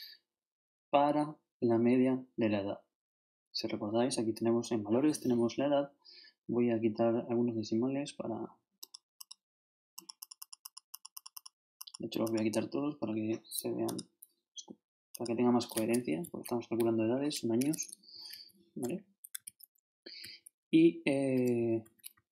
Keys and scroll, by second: 16.0 shift+Down, 17.0 shift+Left, 18.1 shift+Down, 19.3 shift+super+Up, 19.4 shift+super+Left, 20.2 shift+super+Down, 20.8 shift+Down.